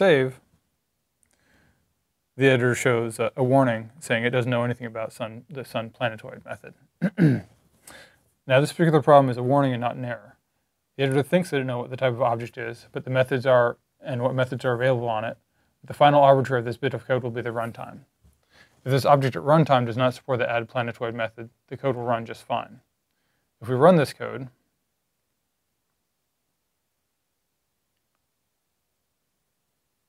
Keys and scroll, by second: 0.6-1.3 typing.